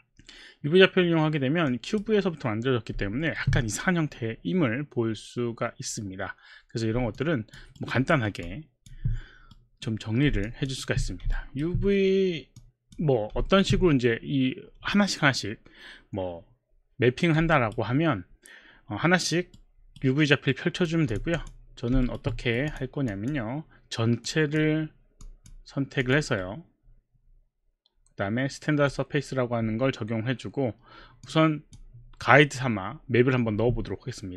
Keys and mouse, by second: 1.7 click, 3.2 alt+middle click, 7.1 alt+click, 7.8 alt+right click, 8.7 alt+click, 8.7 alt+middle click, 9.0 alt+click, 9.0 alt+middle click, 9.5 right click, 10.4 alt+click, 10.9 alt+click, 11.4 alt+right click, 12.6 click, 13.5 alt+middle click, 17.4 right click, 19.6 right click, 20.5 right click, 21.1 click, 21.3 click, 22.0 alt+right click, 22.7 click, 23.1 click, 24.3 click, 25.3 click, 26.0 click, 26.4 right click, 31.2 click.